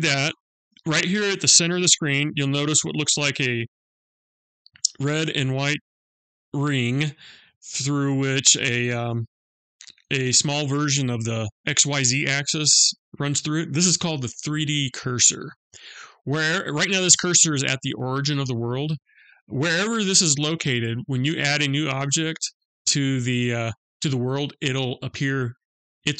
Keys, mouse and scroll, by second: 3.0-3.3 scroll up 2, 3.8-7.2 scroll down 2.